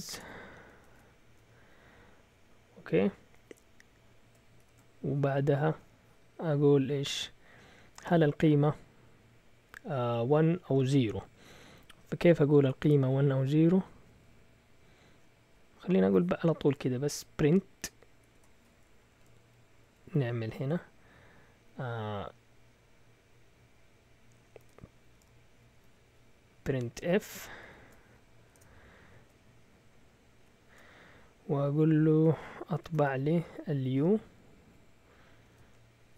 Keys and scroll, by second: 0.1 BackSpace, 0.2 1, 0.9 shift+Tab, 18.3 BackSpace, 19.1 Left, 19.2 Left, 19.3 Left, 19.8 Left, 20.0 Left, 24.3-27.6 typing, 28.5 Delete, 30.3 typing, 32.7 typing, 34.4-36.1 typing.